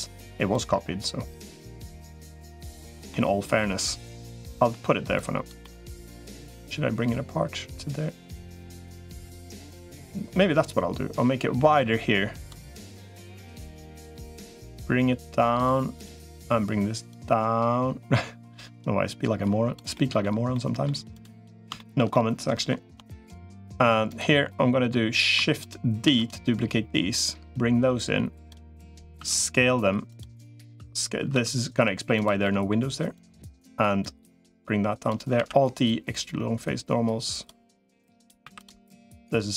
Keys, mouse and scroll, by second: 0.8-2.4 drag, 2.9 middle click, 4.1 middle click, 5.0 click, 5.4 middle click, 6.4-9.0 drag, 9.8-12.4 drag, 12.4 middle click, 13.6-15.6 drag, 16.2 click, 17.0-19.6 drag, 19.7 middle click, 20.3 middle click, 21.5 shift+middle click, 21.9 middle click, 23.0 shift+click, 24.1 middle click, 25.4 shift+click, 25.8 shift+d, 27.0-28.4 drag, 29.0 s, 30.4 s, 32.2 middle click, 33.0 click, 34.4 click, 35.2 alt+e, 38.2 3, 39.0-39.5 drag.